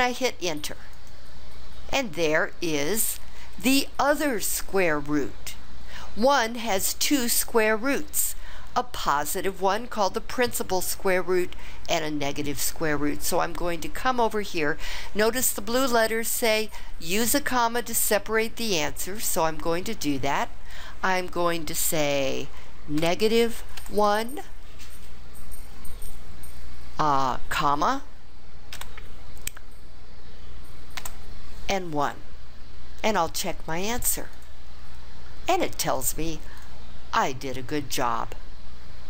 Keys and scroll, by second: 0.9 Return.